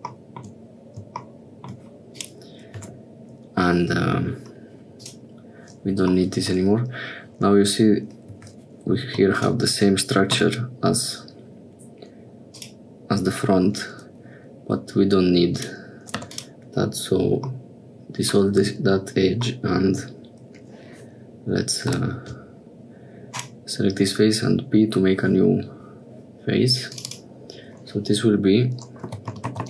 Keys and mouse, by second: 2.1 click, 2.9 Tab, 5.0 click, 8.5 2, 10.4 x, 15.6 click, 16.4 3, 17.7 click, 22.0 p, 27.0-29.6 drag.